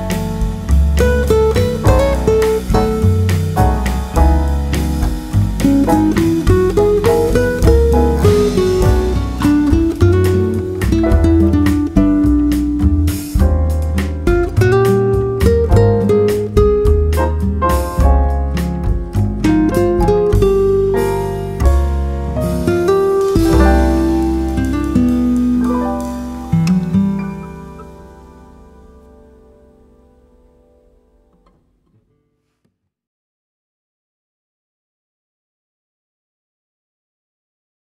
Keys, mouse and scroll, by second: 0.0 Escape, 2.3 z, 3.4 KP_5, 3.7 KP_5, 6.5 n, 8.8-10.6 drag, 13.0-14.7 drag, 18.5-20.2 drag, 23.6-25.3 drag, 28.9 KP_0, 31.1-32.1 middle drag, 32.5-34.2 middle drag, 33.1 KP_7, 34.7 middle click, 35.5 middle click, 36.5 KP_7.